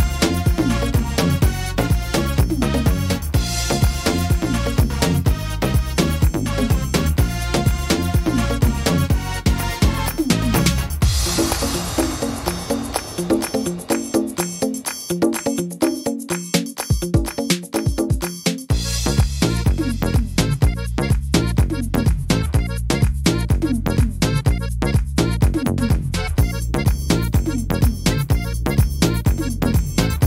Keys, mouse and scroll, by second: 0.5 right click, 1.8 shift+right click, 3.7 click, 12.3 right click, 13.8 right click, 18.7 ctrl+z, 19.0 ctrl+z, 19.5 ctrl+z, 19.9 ctrl+z, 20.3 ctrl+z, 21.4 ctrl+z, 21.9 ctrl+z, 22.3 ctrl+z, 22.8 ctrl+z, 24.7 right click, 25.8 shift+right click, 28.1 click.